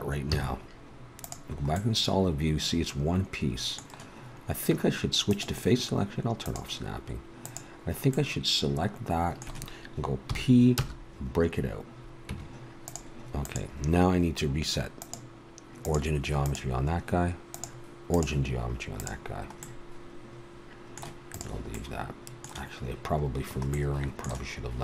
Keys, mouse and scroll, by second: 0.3 z, 1.7 middle click, 5.3-9.3 drag, 9.3 middle click, 10.3 p, 12.3 Tab, 13.4-19.6 drag, 19.6-20.9 middle drag, 21.3 right click, 21.9-23.2 middle drag.